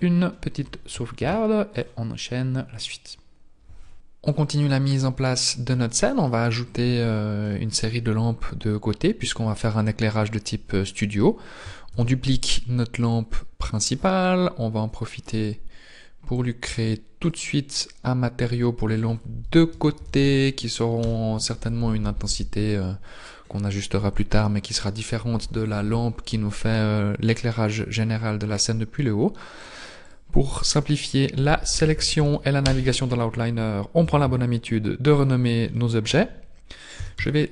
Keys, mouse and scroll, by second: 1.2 ctrl+s, 3.9-4.3 scroll down 1, 4.3 click, 4.4 click, 5.8 middle click, 6.4-7.2 scroll down 3, 7.2 middle click, 8.5-9.2 scroll down 2, 11.9 shift+d, 13.1 click, 16.4 click, 17.3 click, 21.0 click, 32.6 click, 35.8 middle click, 37.0 s.